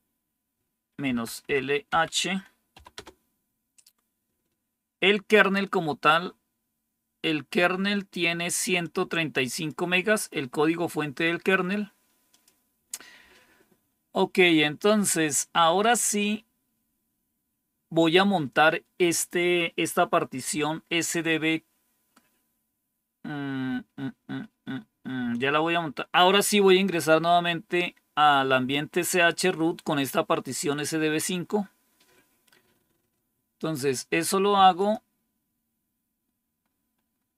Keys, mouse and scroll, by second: 1.0 Up, 1.4 Left, 1.8 Right, 2.6 h, 2.9 Return, 8.7 click, 12.2 click, 34.7 click, 36.5 scroll down 2, 37.1 scroll down 2.